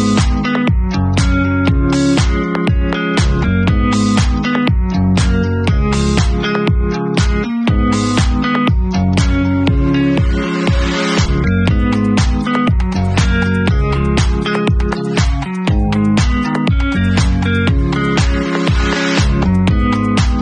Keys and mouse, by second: 2.6-9.7 drag, 3.5 KP_0, 6.2 KP_0, 9.7-13.0 middle drag, 13.0 click, 13.1-17.2 middle drag, 17.2-20.4 drag.